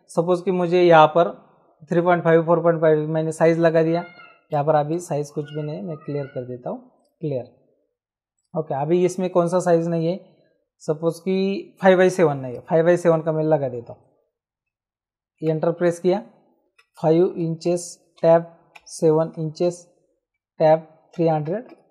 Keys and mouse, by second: 4.5 Escape, 7.0 click, 8.4 right click, 12.5 click, 15.5 Return, 15.5 KP_Enter, 16.8 KP_5, 17.7 n, 18.2 Tab, 18.8-19.6 typing, 20.3 Tab, 21.2 KP_3.